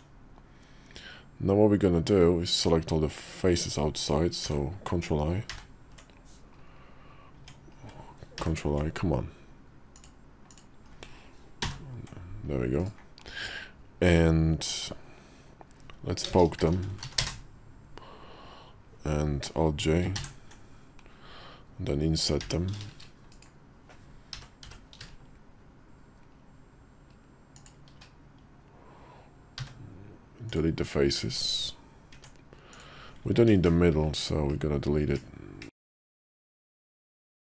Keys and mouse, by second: 11.4 ctrl+i, 11.5 ctrl+k, 16.1 space, 20.0 alt+j, 22.3 i, 24.2 i, 29.4 x, 31.1 Tab, 32.0 Tab, 32.6 click, 34.4-35.0 ctrl+KP_Add, 35.7 ctrl+KP_Subtract, 36.0 ctrl+KP_Subtract, 36.9 x.